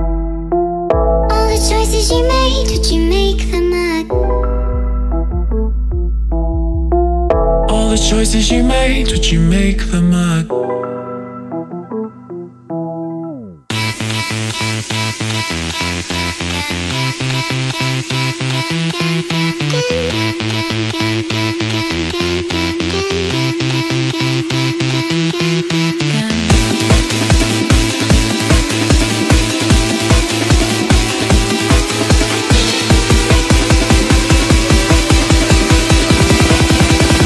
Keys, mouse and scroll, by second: 0.0 click, 2.2-2.5 typing, 2.5 Tab, 2.7 Tab, 3.5-4.3 typing, 7.0-9.3 typing, 8.2 shift+Tab, 13.7 click, 16.2 click, 18.1 click, 19.8 click, 20.4 click, 21.8 click, 23.8 click, 25.1 middle click, 25.1 middle click, 26.2 middle click, 26.8 click, 27.1 click, 28.2 click, 28.4 click, 29.4 click, 30.5 click, 31.5 click, 33.4 click, 33.8 click, 34.3 click, 35.3 click, 36.8 click.